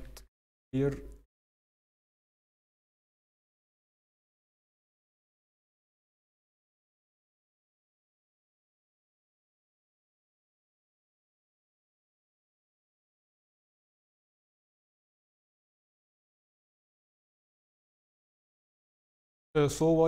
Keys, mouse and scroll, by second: 13.8 s, 15.5 s, 19.9-20.0 scroll.